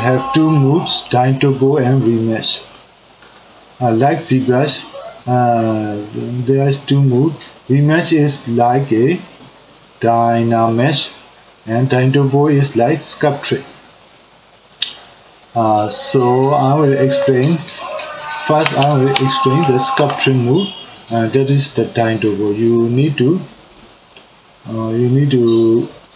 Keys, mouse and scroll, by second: 17.8-26.1 middle drag.